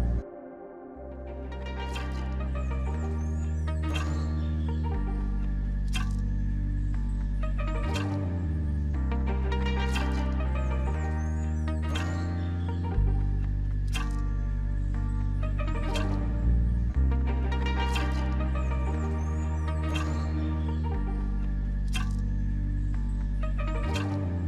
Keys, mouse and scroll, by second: 2.5 double click, 3.3 alt+Tab, 10.0 ctrl+v, 10.7 Return, 11.2 Escape, 12.6 End, 12.8 BackSpace, 13.2 Home, 13.3 Delete, 13.6 Return, 22.4 r, 24.1 alt+middle click.